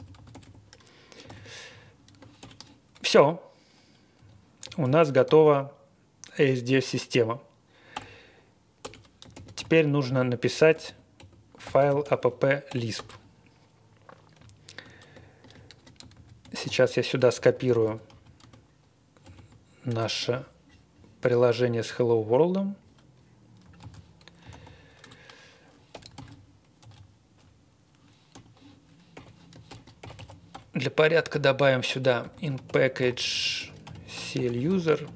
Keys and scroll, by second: 0.0-2.9 typing, 1.6 Tab, 4.1 Escape, 4.5-5.7 typing, 7.9 BackSpace, 8.8 Return, 9.0-12.9 typing, 16.1 ctrl+z, 17.1-19.7 typing, 19.8 Return, 23.8 super+c, 24.1-26.4 typing, 25.0 Return, 26.8 Escape, 26.9-27.3 Up, 28.3-35.0 typing.